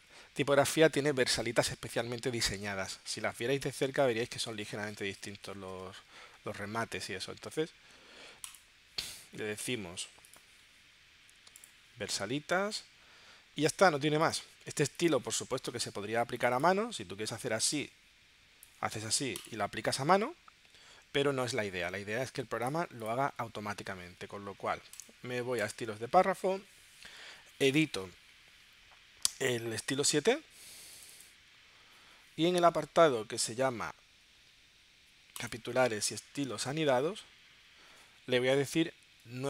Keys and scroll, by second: 21.6 super+z.